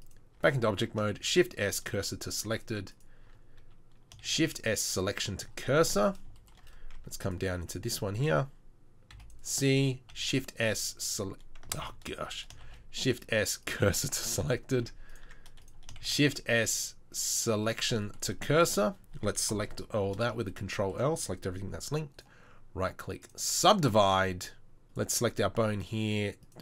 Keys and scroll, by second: 0.4 Tab, 1.1 shift+s, 2.5 Tab, 3.3 Tab, 4.3 shift+s, 7.0 shift+s, 7.0 Tab, 7.5 Tab, 9.2 c, 10.1 shift+s, 11.9 ctrl+z, 12.7 shift+s, 14.9 Tab, 15.3 Tab, 16.0 shift+s, 19.5 ctrl+l.